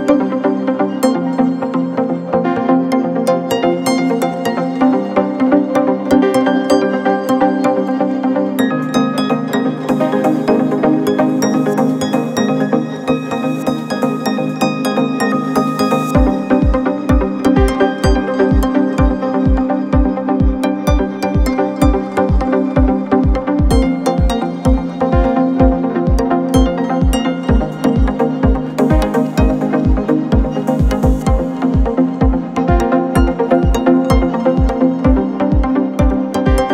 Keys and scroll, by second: 3.3 ], 4.3 ], 4.8 ], 9.2 [, 9.4 ], 10.5 ], 11.9 ], 13.1 ], 13.4 Delete, 23.5 ], 26.5 ], 27.9 ], 34.2 4.